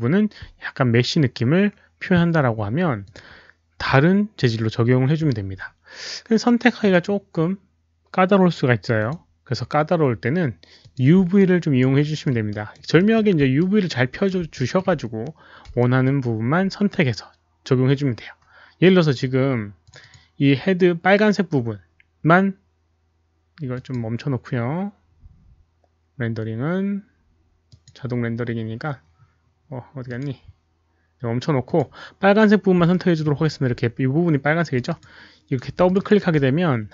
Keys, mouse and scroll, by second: 3.0 click, 6.7 click, 8.9 click, 10.7 click, 11.4 alt+right click, 12.0 alt+middle click, 12.5 alt+right click, 12.9 alt+middle click, 13.1 click, 13.6 alt+right click, 13.6 alt+middle click, 13.6 click, 14.6 alt+middle click, 14.6 click, 15.7 alt+middle click, 15.7 alt+right click, 15.7 click, 16.3 alt+middle click, 19.6 click, 19.7 alt+middle click, 19.7 alt+right click, 19.9 click, 21.6 click, 21.6 alt+middle click, 21.6 alt+right click, 22.8 click, 22.8 alt+middle click, 22.8 alt+right click, 23.7 click, 25.1 click, 25.1 alt+middle click, 27.6 click, 30.0 click, 31.6 click, 32.9 alt+middle click, 32.9 click, 34.7 click, 34.7 alt+middle click, 35.0 alt+middle click, 35.8 shift+click.